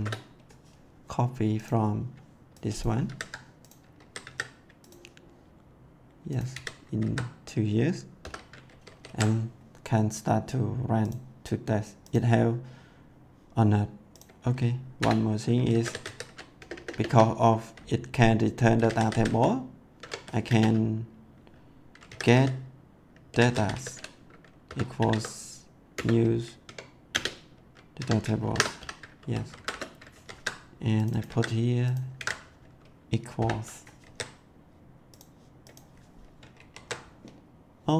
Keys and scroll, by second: 3.0 ctrl+c, 3.9 ctrl+a, 4.2 ctrl+c, 6.5 ctrl+v, 6.8 ctrl+s, 8.6 ctrl+s, 14.9 Return, 15.4-16.6 typing, 18.5-20.4 typing, 20.0 Tab, 21.8-25.5 typing, 25.9 Return, 27.0 space, 27.9 Tab, 28.3 shift+9, 28.7 ;, 29.1 ctrl+s, 29.6 Return, 30.1 ctrl+s, 31.2 ctrl+c, 32.1 ctrl+v, 33.3 =, 34.0 ctrl+s, 36.5 ctrl+s.